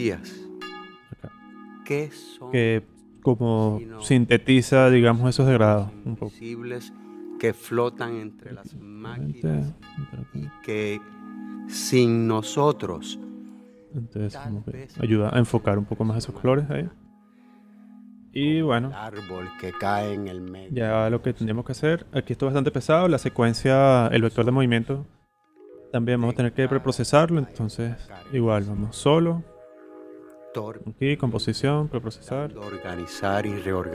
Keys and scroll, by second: 16.1 z, 17.8 v.